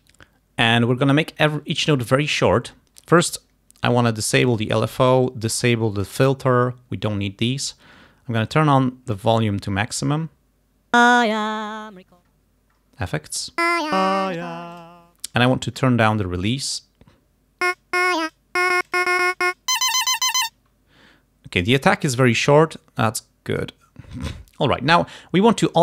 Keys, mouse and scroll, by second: 4.6 click, 6.1 click, 9.5-10.2 scroll up 2, 10.2 scroll down 2, 11.1 click, 12.2-12.5 scroll up 2, 12.8-13.4 scroll down 2, 13.7 click, 14.1 click, 14.8 click, 15.9-16.3 scroll down 2, 16.5 scroll up 2, 17.8 click, 18.7-20.8 drag, 23.1 click.